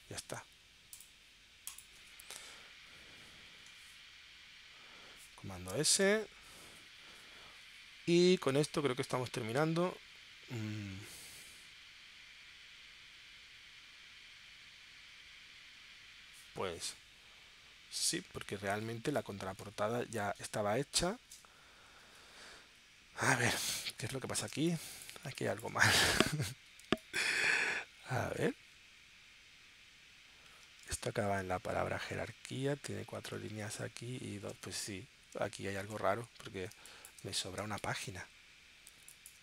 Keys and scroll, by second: 6.4 super+s, 24.5 space, 26.9 space, 27.7 super+Tab, 31.4 super+Tab, 32.7 super+Tab, 33.7 super+Tab, 34.9 super+Tab, 35.8 super+Tab, 36.7 space, 37.6 space, 38.3 space, 38.9 space.